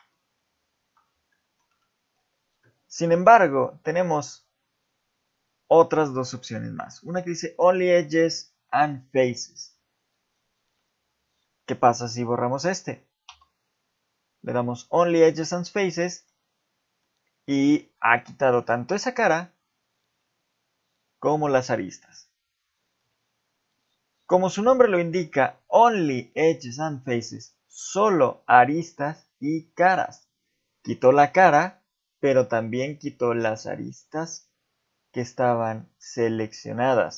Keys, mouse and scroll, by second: 0.1 ctrl+z, 0.5 ctrl+z, 1.3 shift+middle click, 3.3 x, 13.3 x, 15.9 middle click, 17.0 middle click, 18.0 shift+middle click, 24.8 x.